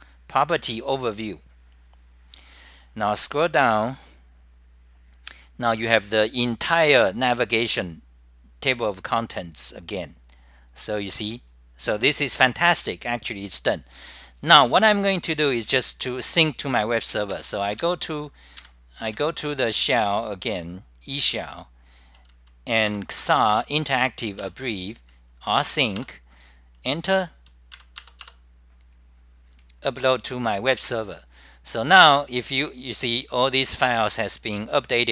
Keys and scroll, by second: 11.8 k, 18.2-21.1 typing, 22.2 super+r, 22.2 e, 23.4 j, 24.4 Return, 25.2-25.9 typing, 26.0 Return, 27.8-28.5 typing, 30.0 Return, 31.6 Delete, 31.6 F10, 32.9-33.7 typing, 34.5-35.1 scroll up 34.